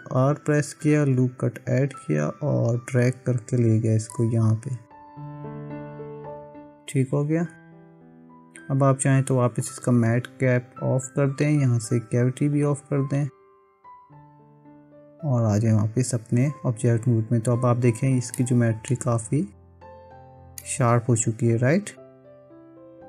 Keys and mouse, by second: 0.1 ctrl+r, 9.6-14.4 drag, 15.2 Tab, 18.4 middle click, 20.6-23.0 middle drag.